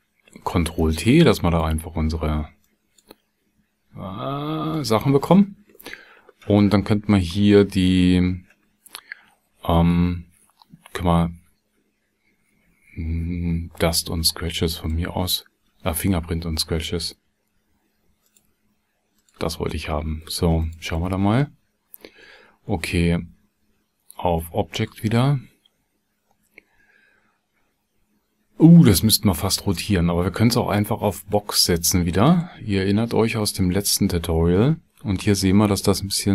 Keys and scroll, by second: 0.2 ctrl+t.